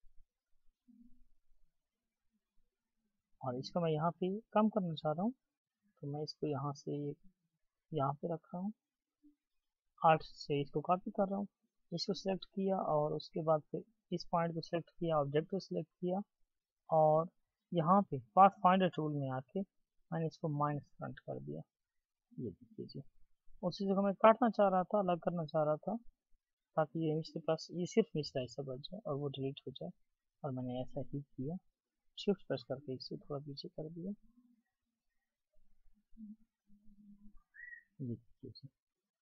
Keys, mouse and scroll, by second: 13.8 shift+click, 23.9 right click, 27.6 Delete, 31.1 Delete.